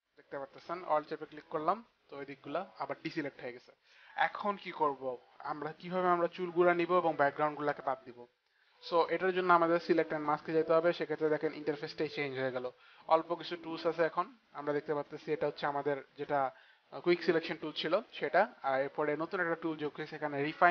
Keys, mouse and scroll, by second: 0.0 alt+click, 10.0 click.